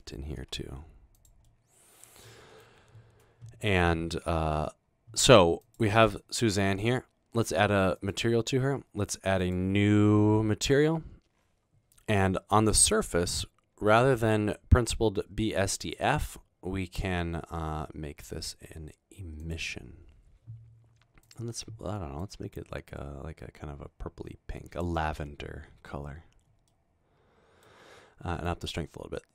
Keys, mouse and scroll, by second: 0.5 typing, 1.5-2.1 middle drag, 2.4 middle drag, 8.0 click, 9.4 click, 15.8 click, 21.3 click, 22.3-25.5 drag, 26.8 middle click, 28.5-29.3 drag.